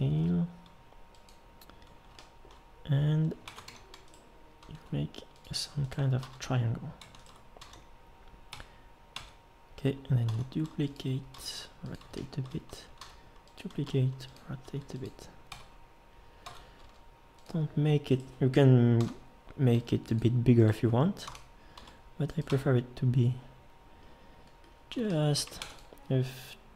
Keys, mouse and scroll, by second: 0.1 g, 3.5 ctrl+Tab, 4.7 e, 6.2 f, 7.6 f, 8.5 Tab, 9.2 Tab, 10.3 shift+d, 11.3 r, 13.0 shift+d, 13.9 r, 14.6 g, 15.5 Tab, 16.4 Tab, 16.8 g, 19.0 l, 19.7 g, 21.3 l, 21.8 g, 22.5 Tab, 25.6 ctrl+s.